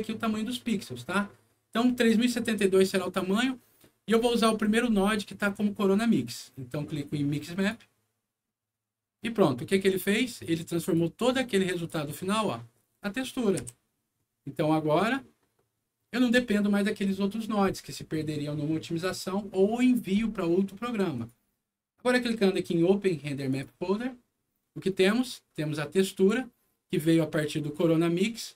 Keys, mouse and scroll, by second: 1.9 click, 3.8-4.2 scroll up 4, 4.4 scroll down 2, 4.8 scroll up 2, 7.5 click, 9.7 middle click, 10.5 click, 10.7 click, 11.3 click, 13.0 middle click, 13.5 F9, 21.1 click, 23.4 click, 26.1 click.